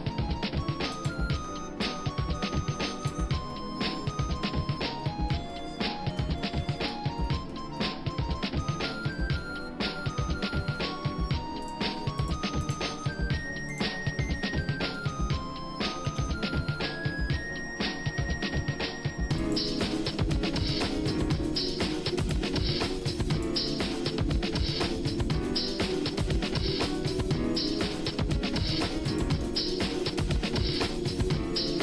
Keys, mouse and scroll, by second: 1.0 ctrl+right click, 1.9-3.3 drag, 3.5 shift+middle click, 4.6 scroll down 1, 4.7 scroll down 1, 5.0 middle click, 5.5 shift+middle click, 6.4 middle click, 6.6-7.2 scroll down 2, 7.2 middle click, 7.8 shift+middle click, 8.9-9.7 scroll up 4, 9.8 shift+middle click, 11.6 click, 12.7 click, 13.7 shift+click, 15.9 shift+d, 20.2-21.5 shift+middle drag, 22.2 click, 22.6 shift+middle click, 23.3 click, 24.7 e, 29.5 shift+middle click, 30.7 e.